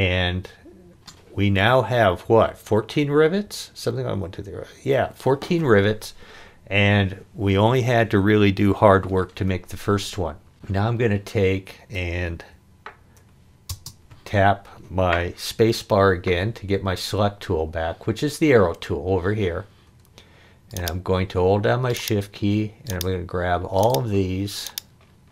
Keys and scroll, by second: 13.7 space.